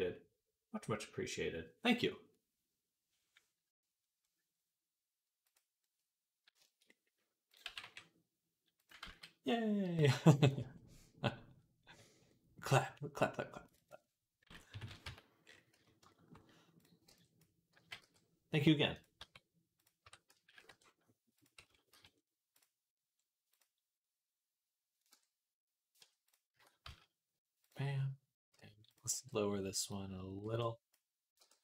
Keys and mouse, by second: 5.3 click, 7.3 click, 7.5 g, 8.9 ctrl+z, 13.6 click, 13.7-19.0 middle drag, 14.6 KP_3, 14.9 Tab, 15.6 z, 16.9 b, 17.9 g, 19.0 Tab, 19.9 Tab, 20.2 a, 20.3 g, 21.2-22.4 middle drag, 21.5 Tab, 21.8 z, 22.4 click, 23.4-24.5 drag, 24.5-26.1 middle drag, 25.0 Tab, 25.8 Tab, 26.1 click, 26.4 Tab, 26.4-31.6 middle drag, 26.7 z, 28.3 l, 28.9 b, 30.3 b, 31.2 g.